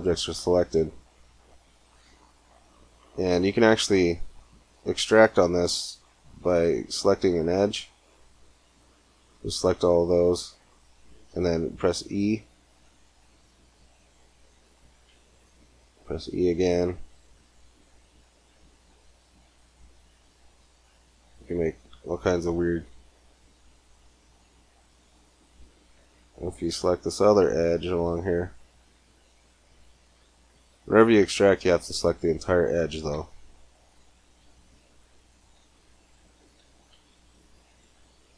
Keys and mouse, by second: 0.5 a, 5.4 a, 6.3 c, 9.3-11.4 drag, 11.4 middle click, 13.0 e, 16.0 e, 17.4 e, 18.9 e, 22.7 e, 24.1 s, 25.8 a, 26.0 c, 32.9 e, 34.6 e, 35.3 e, 37.7 g.